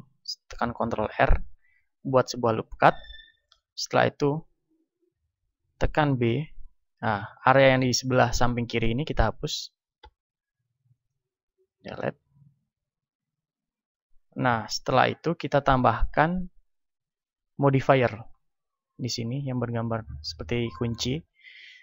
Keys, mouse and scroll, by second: 1.2 a, 4.9 b, 8.9-11.2 middle drag, 10.0 x, 11.8-15.4 middle drag, 15.4-17.2 drag, 21.1-21.8 drag.